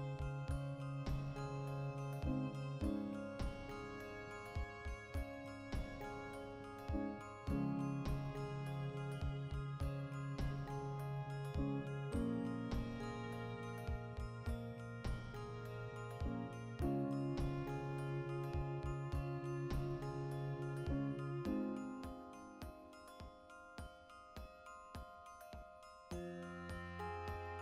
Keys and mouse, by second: 0.3-2.2 drag, 2.0 Tab, 2.2-6.9 middle drag, 2.6 a, 6.9 right click, 7.1-11.3 middle drag, 7.8 alt+q, 9.3 shift+s, 9.9 Escape, 10.1 shift+a, 11.3 right click, 11.7 b, 13.5 g, 14.1 shift+right click, 14.7 ctrl+p, 15.4 right click, 15.6-21.9 ctrl+shift+middle drag, 18.5 alt+q, 19.1 r, 21.9 click, 22.7-26.5 shift+middle drag, 24.3 alt+q, 25.6 r, 26.5 click, 26.8-27.6 ctrl+shift+middle drag.